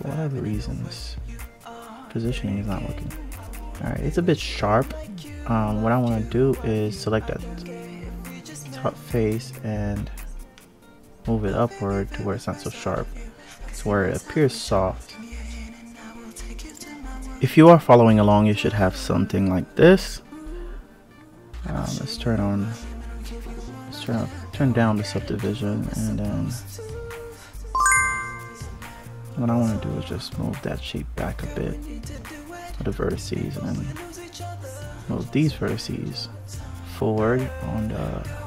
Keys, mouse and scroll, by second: 0.0 alt+z, 0.5 alt+z, 1.2 Tab, 1.4 click, 2.6 click, 3.8 ctrl+z, 4.1 ctrl+z, 4.5 ctrl+z, 4.8 ctrl+z, 5.2 ctrl+z, 5.5 ctrl+z, 5.9 ctrl+z, 6.5 click, 7.1 Tab, 7.5 click, 8.4 click, 12.5 Tab, 13.0 click, 13.8 alt+click, 14.4 click, 15.4 a, 15.7 KP_Divide, 16.1-16.6 scroll up 3, 16.6 click, 17.7 Tab, 20.2-22.2 drag, 22.9 click, 24.9 1, 25.5 click, 26.3 click, 27.1 shift+click, 27.7 shift+click, 28.9 click, 32.5 click, 34.0 shift+click, 34.4 shift+click, 35.2 click, 37.6 click, 38.3 click.